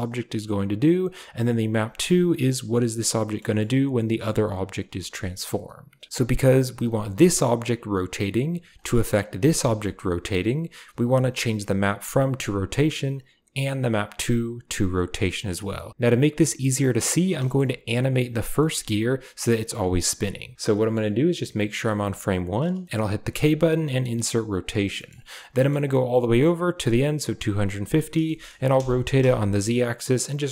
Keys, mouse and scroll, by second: 1.5 click, 3.2 middle click, 3.4 shift+drag, 4.1 shift+click, 4.5 typing, 6.6 click, 6.8 r, 9.0 click, 9.2 r, 12.6 click, 15.0 click, 16.2 click, 18.2 click, 18.6 shift+click, 20.6 click, 22.8 k, 23.3 k, 25.0 middle click, 25.6 middle click, 25.7-27.3 drag, 28.3 shift+middle click, 28.6 r.